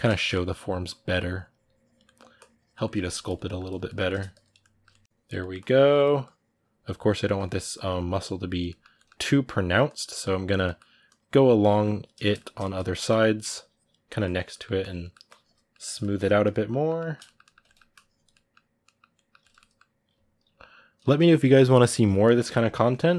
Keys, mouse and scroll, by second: 0.6-1.8 drag, 1.8 middle click, 2.1 click, 2.6 ctrl+middle click, 3.0 click, 3.2 middle click, 3.4 click, 3.6 shift+middle click, 4.1 click, 4.4 middle click, 5.0 click, 5.1 middle click, 5.3-7.0 drag, 7.0 ctrl+middle click, 7.5 click, 8.5 ctrl+middle click, 9.0 click, 9.9 middle click, 10.2 click, 10.4 middle click, 10.8-11.9 drag, 11.9 shift+middle click, 12.8-14.3 drag, 14.3 middle click, 14.6 click, 14.8 middle click, 15.0 click, 15.5 middle click, 16.2 click, 16.5-17.7 middle drag, 17.7 click, 18.1-20.8 middle drag, 20.8 g, 21.0 f, 21.6-23.0 middle drag, 23.0-23.1 drag.